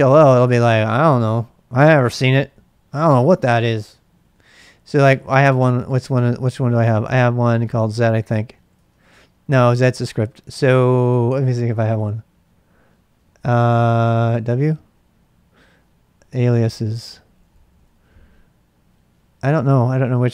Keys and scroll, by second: 0.0-0.5 typing, 0.6 Return, 4.1-6.2 typing, 7.5-9.1 typing, 13.1-14.6 typing, 16.1-18.0 typing.